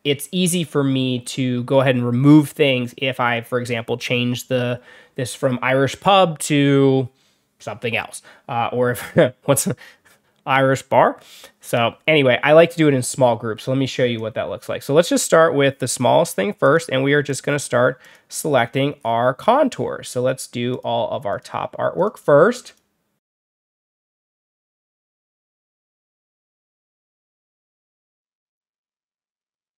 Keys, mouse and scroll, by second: 14.0 click, 15.8 click, 16.5 click, 17.2 click, 17.9 click, 18.5-18.9 scroll up 1, 18.9-19.5 scroll down 2, 19.9 click, 20.6 click, 21.2 click, 21.9 click, 22.5 click, 23.1 click, 23.8-24.1 drag, 24.4 click, 24.8 scroll down 1, 25.4-25.8 drag, 26.0 drag, 26.4 click, 26.6 drag, 27.3 drag, 27.6 click.